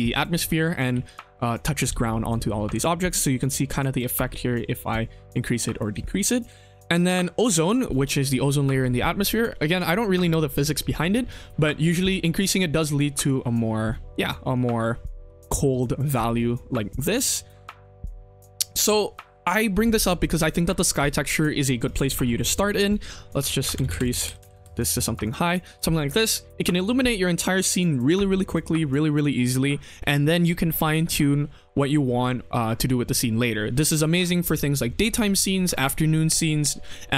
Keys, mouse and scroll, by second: 0.9 ctrl+z, 3.0-5.8 drag, 5.9 ctrl+z, 8.0 click, 11.5-12.9 drag, 13.2-14.5 middle drag, 15.0-15.4 middle drag, 16.0 middle click, 16.7 KP_1, 17.2 middle click, 17.8 middle click, 18.1 shift+middle click, 21.8 right click, 22.3-24.5 drag, 23.7 BackSpace, 24.0 KP_0, 24.2 KP_0, 25.2 click, 25.5 shift+middle click, 25.8 middle drag, 26.7 middle click, 27.0 middle click.